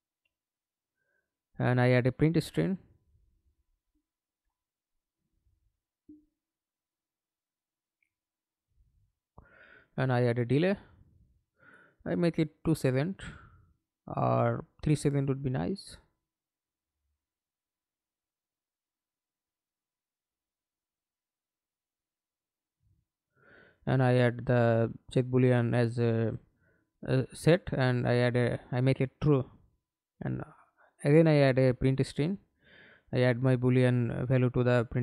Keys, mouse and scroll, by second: 0.0-2.3 scroll up 1, 2.3-2.7 scroll up 1, 2.9-4.4 typing, 4.8 Return, 6.6 right click, 8.4 d, 12.8 ctrl+a, 13.3 2, 13.6 Return, 14.7 right click, 16.9 Right, 17.3 3, 17.4 Return, 18.4 right click, 20.2 right click, 22.2 double click, 25.1 right click, 26.1 right click, 27.4 ctrl+c, 27.6 ctrl+right click, 28.9 ctrl+v.